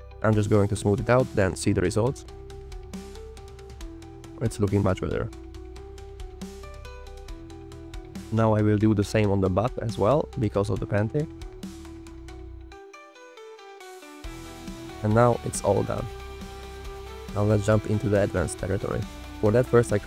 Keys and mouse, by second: 0.0-0.6 drag, 0.8 click, 1.3 click, 1.9 click, 3.0 click, 3.7 drag, 4.2 g, 4.3 click, 5.4 g, 7.9 alt+click, 8.3 middle click, 9.8 click, 10.0 middle click, 10.2 f, 10.2 click, 11.1 click, 13.0 click, 14.0 alt+click, 14.8 g, 15.9 g, 17.5 click, 18.1 g.